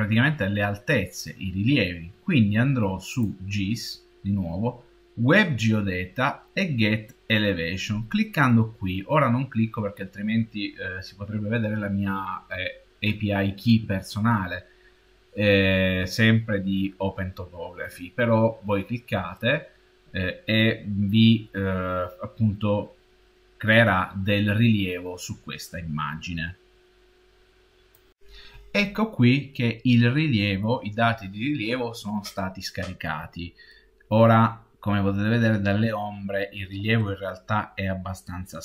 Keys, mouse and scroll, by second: 3.0 click, 33.6-35.2 middle drag, 36.1-36.9 scroll up 6, 36.3 middle click, 36.9-38.6 middle drag.